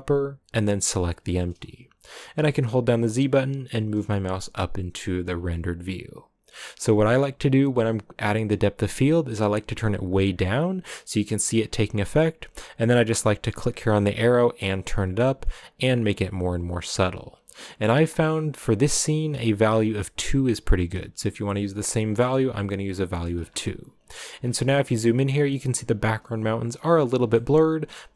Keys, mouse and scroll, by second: 4.6 z, 9.4-12.8 drag, 13.6-20.6 drag, 22.6 shift+middle click, 23.2 scroll up 5, 24.4 scroll up 5, 27.0 scroll down 5, 27.3 shift+middle click.